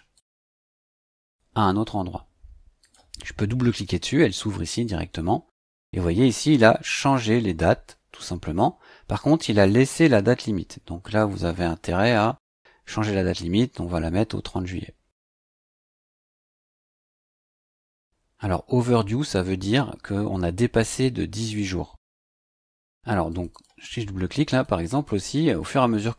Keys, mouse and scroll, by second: 2.8 click, 11.2 click, 15.3 click, 16.9 click, 23.3 click, 24.5 click, 24.9 click.